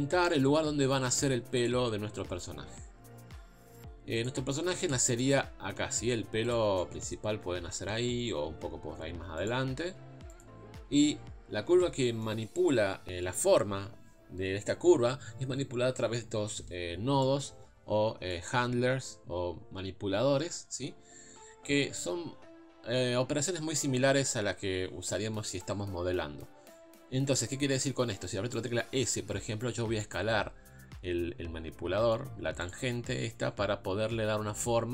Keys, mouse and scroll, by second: 0.4 Tab, 1.6-2.6 drag, 2.6 g, 4.8 click, 5.2 middle click, 6.0 z, 6.8-7.8 middle drag, 7.8 KP_3, 8.2 scroll up 2, 8.4 g, 9.6 scroll down 1, 9.8 z, 10.8 scroll up 2, 11.2 scroll down 4, 11.7-12.0 scroll up 3, 12.0-14.0 shift+middle drag, 17.2-18.3 drag, 20.9 scroll down 2, 21.3-22.0 scroll up 3, 29.2 s.